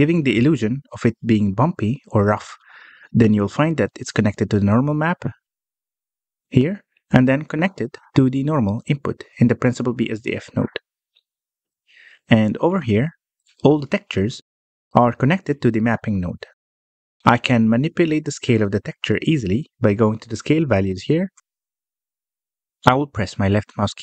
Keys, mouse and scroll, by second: 2.8 Tab, 3.5-6.5 middle drag, 6.5 click, 7.5 scroll up 4, 8.0-11.2 middle drag, 12.5 Tab, 13.2-13.9 scroll down 12, 13.9 middle click, 14.5-14.9 scroll up 6, 15.4-17.7 middle drag, 17.7-18.5 scroll up 3, 18.5-19.3 scroll up 8, 19.5-22.5 middle drag, 23.9-24.0 drag.